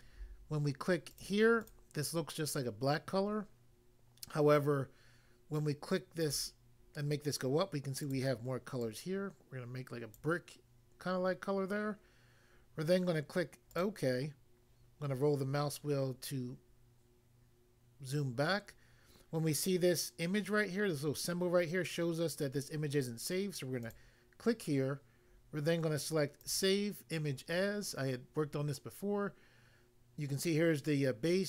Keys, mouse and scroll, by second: 1.2 click, 1.6 click, 1.7 double click, 6.2 click, 8.1 click, 8.2 click, 8.8 click, 10.1 click, 13.8 click, 13.8 click, 15.1 scroll down 1, 16.1-16.5 scroll down 1, 16.6-17.2 scroll down 1, 23.8 click, 23.9 click, 26.4 click, 26.5 click.